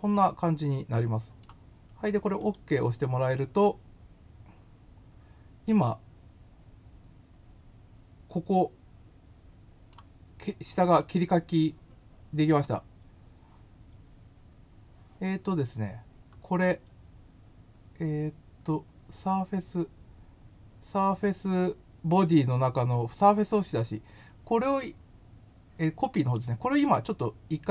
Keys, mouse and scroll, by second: 2.4 click, 3.6 scroll up 1, 9.2 middle click, 10.9-12.4 middle drag, 15.9 scroll, 16.0 scroll, 18.9 scroll up 1, 26.9 right click.